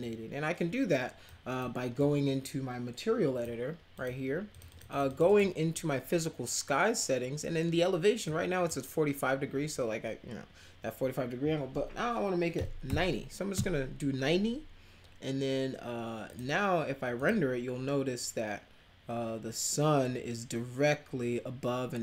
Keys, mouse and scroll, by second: 1.2-1.6 drag, 1.9-3.4 drag, 3.9 click, 4.5 click, 4.7 click, 4.9 click, 5.0 click, 5.2 click, 8.2 click, 12.5 9, 12.8 0, 13.5 Return, 16.3 click, 17.1 click.